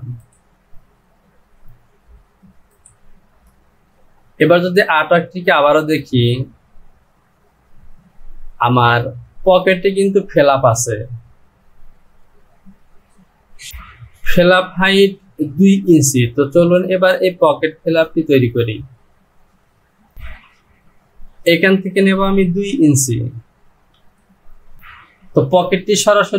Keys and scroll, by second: 24.0 Down.